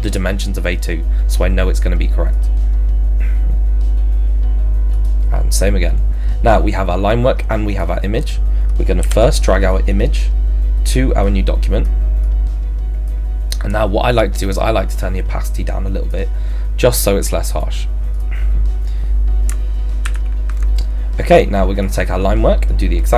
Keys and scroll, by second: 9.0 v.